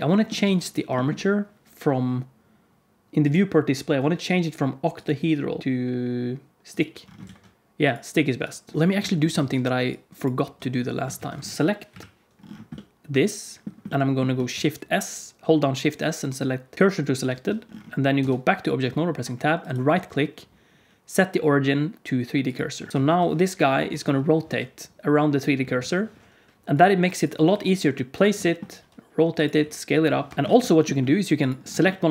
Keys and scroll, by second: 0.4 alt+a, 5.6 alt+a, 7.2 alt+a, 8.7 Tab, 9.3 alt+z, 10.3 z, 11.1 ctrl+s, 11.8 KP_Decimal, 14.4 shift+s, 18.1 Tab, 22.9 KP_1, 23.0 KP_3, 23.8 r, 27.4 g, 28.7 r, 29.5 s, 30.3 ctrl+z, 30.3 g.